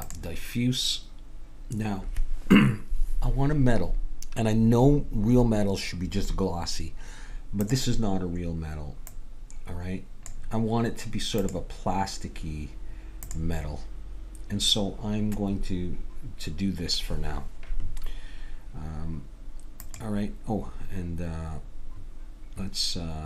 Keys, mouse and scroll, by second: 7.6-9.4 drag, 11.5-13.1 drag, 17.1-19.8 middle drag, 19.8-21.5 drag.